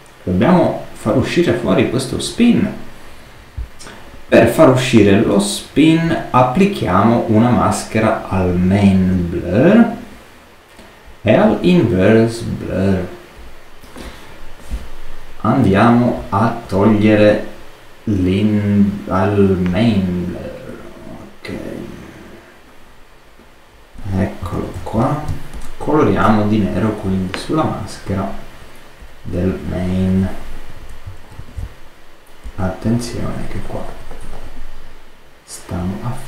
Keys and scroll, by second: 24.4 super++, 25.2 super+space, 31.3 alt+super+z.